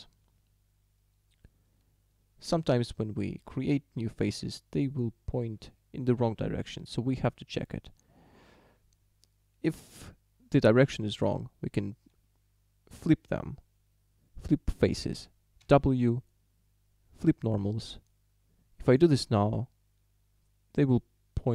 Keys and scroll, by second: 15.6 w.